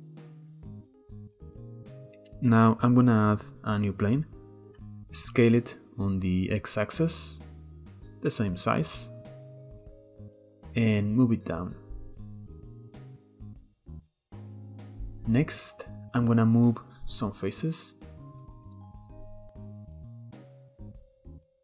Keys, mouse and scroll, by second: 1.0-1.4 scroll down 4, 1.1 middle click, 1.4 click, 1.5 click, 1.9 click, 2.6 shift+a, 4.6-5.7 middle drag, 5.7 KP_7, 6.7 s, 9.0-9.4 middle drag, 9.4-10.3 scroll up 2, 10.3-11.4 drag, 12.6-13.5 middle drag, 13.5 click, 13.9 Tab, 14.7-15.5 middle drag, 15.5 scroll up 1, 15.7-16.2 middle drag, 16.2 click, 17.1-19.1 shift+middle drag, 19.6 click, 19.8 click, 20.2 click.